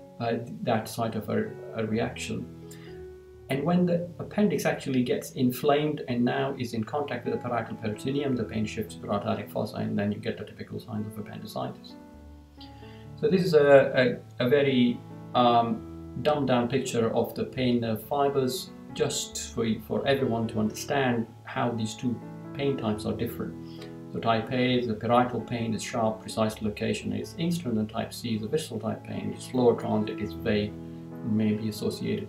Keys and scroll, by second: 12.0 Down.